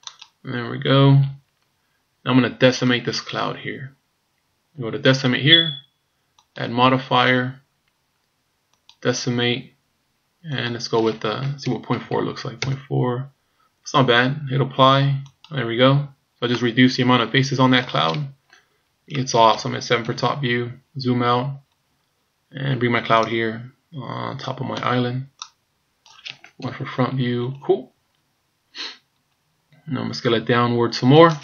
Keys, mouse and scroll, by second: 5.1 click, 6.5 click, 10.6 click, 15.3 click, 16.6 middle click, 19.1 middle click, 20.0 KP_7, 20.8-21.3 scroll down 4, 21.5-22.4 scroll down 7, 23.2 click, 25.5 click, 26.6 KP_1, 27.3-28.6 scroll up 13, 29.1-29.8 scroll down 2, 30.4 s.